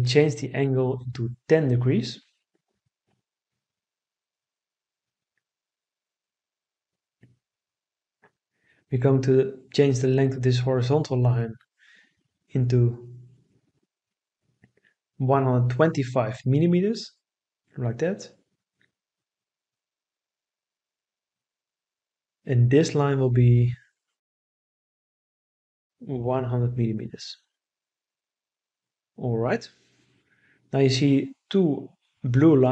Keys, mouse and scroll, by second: 0.3 1, 0.6 0, 1.6 Return, 16.4 1, 16.7 2, 17.3 5, 18.0 Return, 26.7 1, 27.8 0, 28.5 0, 29.9 Return.